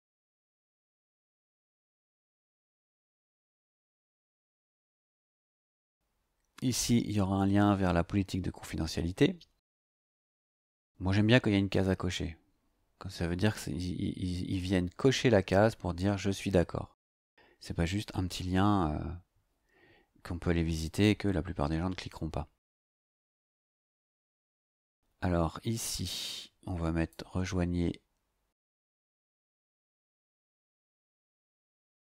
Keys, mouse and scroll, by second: 0.0-2.4 typing, 23.1 click, 23.7 click, 27.1-30.9 drag.